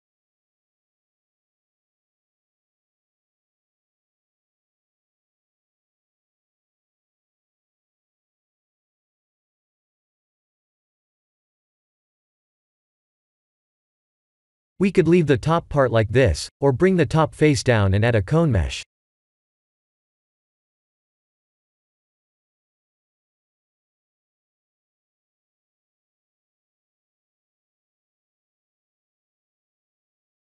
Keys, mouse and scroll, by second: 0.1 click, 0.8 click, 4.5 middle click, 7.2 click, 8.7 click, 10.0 click, 10.4 middle click, 11.6-12.4 scroll up 8, 12.4 middle click, 15.8 middle click, 16.1 middle click, 16.5 KP_1, 17.0 shift+z, 18.0 1, 18.9 click, 19.6 Tab, 20.0 1, 20.2 click, 20.5 b, 21.6 g, 24.6 click, 25.1 b, 27.6 KP_1.